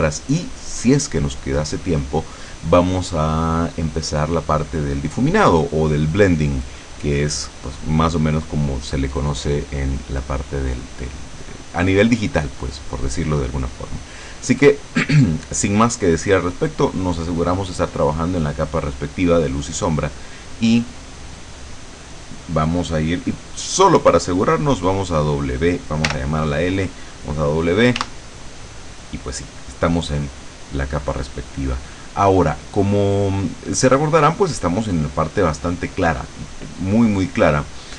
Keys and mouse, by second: 17.2 click, 18.7 click, 21.5 click, 26.2 l, 28.1 w, 30.2 click.